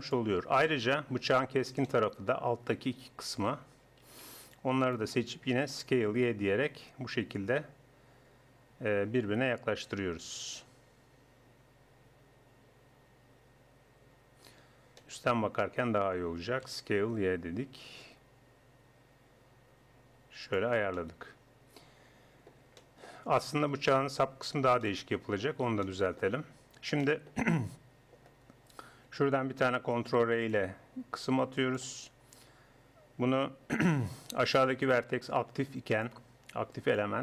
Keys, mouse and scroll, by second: 0.3-2.2 middle drag, 3.3 a, 3.5 a, 4.0 a, 5.7 s, 6.9 middle click, 15.0-16.9 middle drag, 16.7 s, 20.7-23.7 middle drag, 23.7 KP_1, 30.0 ctrl+r, 34.5-35.7 drag, 35.7 right click, 36.8 click.